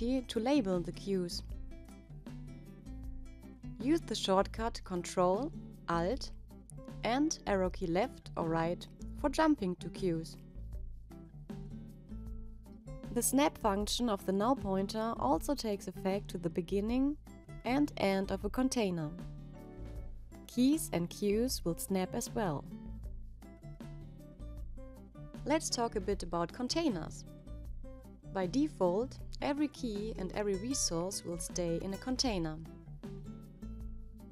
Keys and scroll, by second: 6.8 ctrl+alt+Left, 10.4 ctrl+alt+Left.